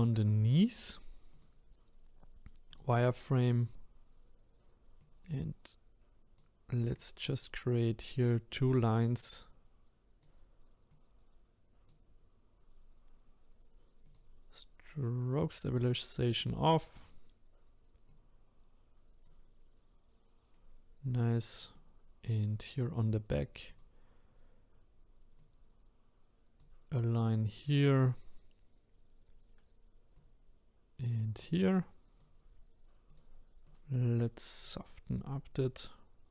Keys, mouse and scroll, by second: 0.0 scroll up 1, 1.3-3.7 drag, 5.0-13.9 drag, 14.0-16.4 drag, 16.4-17.1 scroll down 3, 17.1 scroll up 1, 18.1-20.5 drag, 20.5-21.7 scroll down 4, 21.7-23.7 middle drag, 23.7 click, 24.0-25.4 scroll up 5, 25.4-36.3 drag.